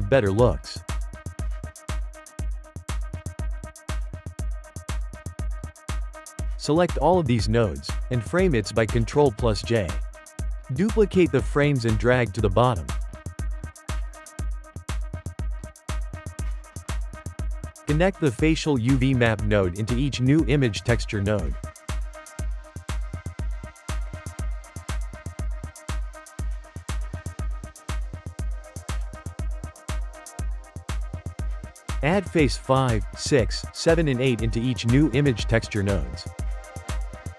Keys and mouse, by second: 1.3 shift+click, 1.8 g, 2.7 shift+middle click, 3.1 click, 3.8 g, 5.9-6.9 shift+middle drag, 6.9 click, 9.2 ctrl+j, 9.8 shift+middle click, 10.4 shift+d, 13.3-13.9 shift+middle drag, 13.9 click, 14.4 g, 16.2-17.8 ctrl+middle drag, 17.8 click, 18.8 shift+middle click, 19.7 click, 20.5-21.2 shift+middle drag, 21.2 click, 22.2-23.2 ctrl+shift+middle drag, 23.2 click, 24.6 shift+middle click, 25.3 click, 25.5 g, 26.8 shift+middle click, 27.6 g, 28.7-31.4 shift+middle drag, 31.4 click, 32.7 click, 33.1 shift+middle click, 33.5 click, 34.4 click, 34.6 shift+middle click, 35.1 click, 36.2 click, 36.4 shift+middle click, 36.9-37.3 drag.